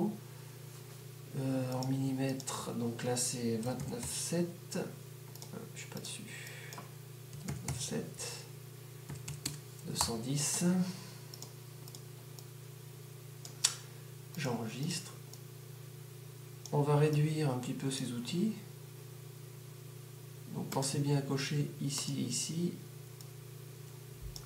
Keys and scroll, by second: 0.8 typing, 3.7-5.3 typing, 7.4-11.3 typing.